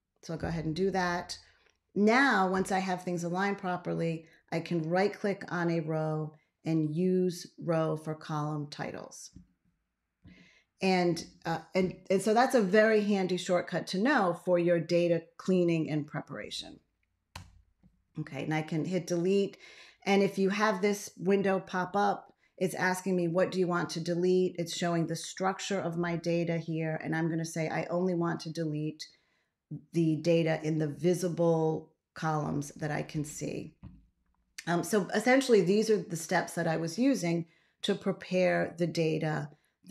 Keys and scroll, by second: 17.2 BackSpace.